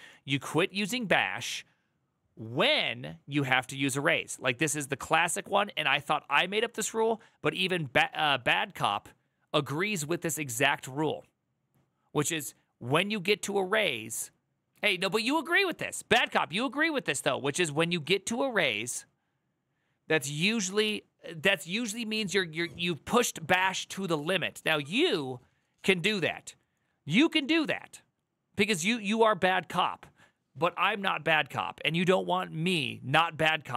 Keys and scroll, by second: 14.7 alt+[.